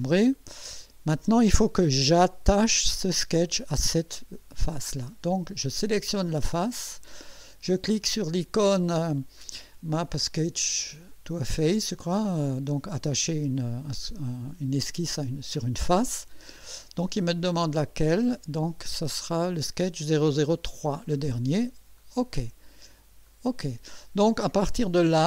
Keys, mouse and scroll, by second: 0.2 right click, 4.6 middle click, 5.8 click, 16.3 click, 17.7 click, 20.7 click, 22.0 click, 23.3 click, 25.1 click.